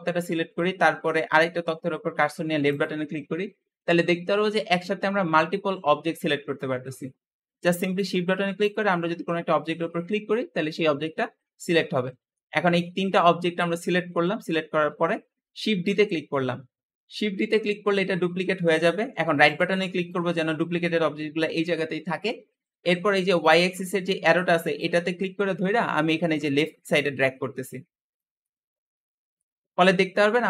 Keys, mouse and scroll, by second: 2.5 shift+click, 3.6-6.7 shift+middle drag, 8.5 shift+click, 11.3-11.8 scroll down 1, 11.8-15.8 middle drag, 15.8 shift+d, 24.6 click, 28.3-29.4 middle drag, 29.4-29.9 scroll up 3, 29.9-30.4 middle drag.